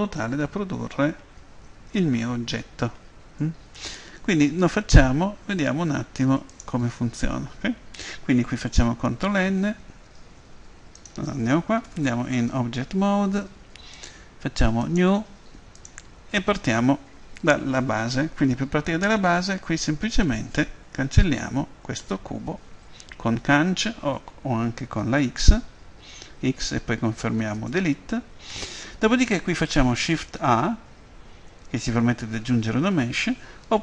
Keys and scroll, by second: 9.1 ctrl+n, 11.8 Tab, 21.9 Delete, 24.8 Escape, 25.5 x, 30.6 shift+a, 33.0 Escape.